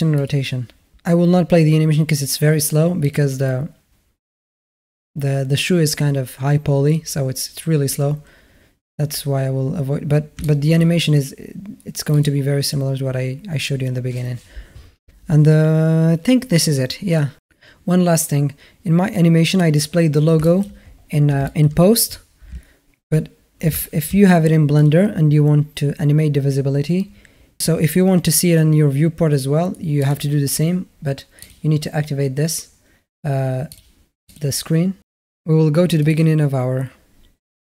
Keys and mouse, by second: 2.8 click, 10.2-10.6 middle drag, 11.9 click, 20.2 middle drag, 21.3 shift+middle drag, 22.3 shift+a, 23.6 shift+drag, 30.8-34.1 drag, 35.9 click.